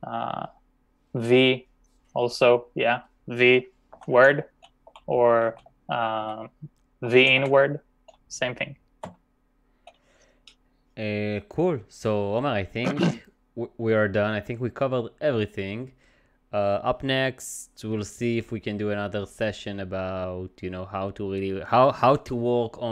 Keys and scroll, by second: 3.7-7.9 typing, 9.1 v.